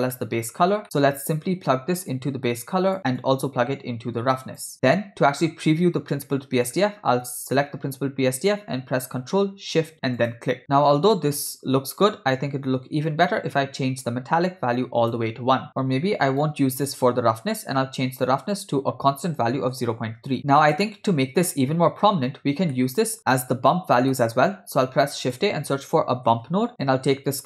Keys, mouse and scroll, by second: 0.2 middle click, 0.8 ctrl+middle click, 1.1 middle click, 2.2-3.0 drag, 3.2-4.7 drag, 4.8 middle click, 6.1 middle click, 6.7 click, 10.4 ctrl+shift+click, 13.0-15.2 drag, 16.6-17.2 ctrl+right drag, 18.5-20.4 drag, 22.8 middle click, 24.2 middle click, 24.9 shift+a.